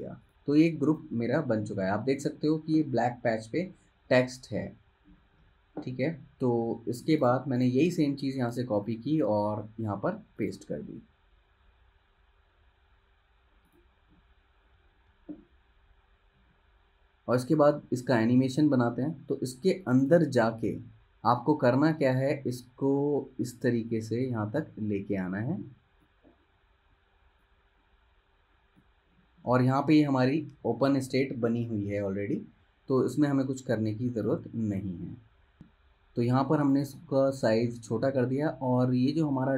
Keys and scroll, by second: 6.7 super+z, 8.6 super+c, 9.7 super+v.